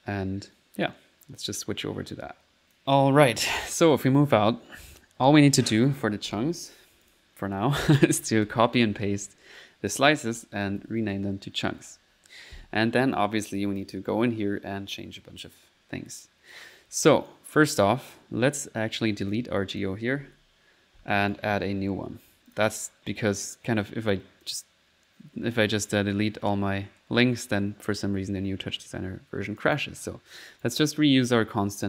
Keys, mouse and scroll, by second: 2.7 click, 2.7 s, 7.1 click, 8.2 ctrl+c, 8.3-9.0 typing, 9.9 click, 13.2 click, 14.4 middle click, 17.3 click, 18.1-19.2 middle drag, 19.2 click, 19.8 click, 20.4 Delete, 21.0-22.2 typing, 21.3 right click, 22.5 click, 23.4 click, 24.5 click, 25.8 click, 29.6 click, 30.6 click, 31.5 click.